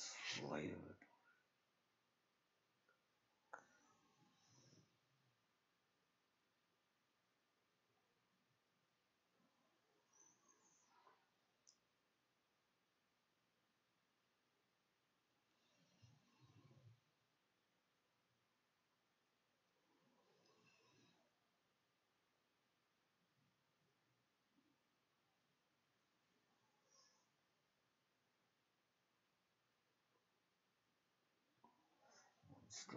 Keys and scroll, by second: 8.3 ctrl+shift+z, 8.4 ctrl+shift+s, 9.3 2.